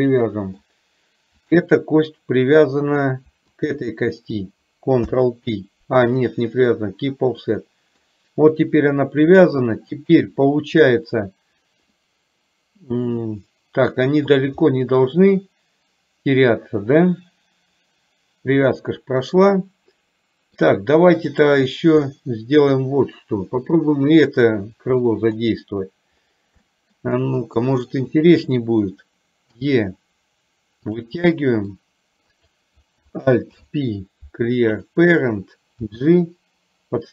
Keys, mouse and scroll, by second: 3.7 shift+click, 5.2 ctrl+p, 7.6 middle click, 12.1-13.9 middle drag, 14.7-20.7 middle drag, 21.4 click, 22.2 middle click, 25.2 middle click, 26.7 shift+middle click, 28.2 click, 29.6 e, 31.3 middle click, 32.4 click, 33.7 alt+p, 35.9 g.